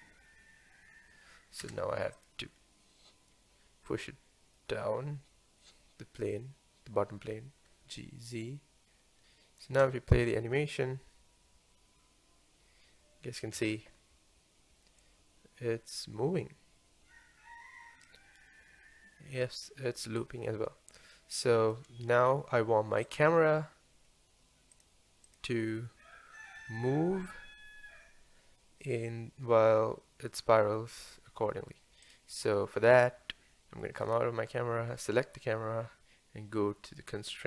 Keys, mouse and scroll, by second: 1.8 space, 2.2 click, 7.3 g, 9.2 click, 9.7 space, 13.6 space, 15.1-18.2 drag, 23.1 click, 24.7 click, 25.3 click, 26.6 g, 33.6-34.6 scroll down 5, 33.6 middle click, 34.6-37.4 shift+middle drag.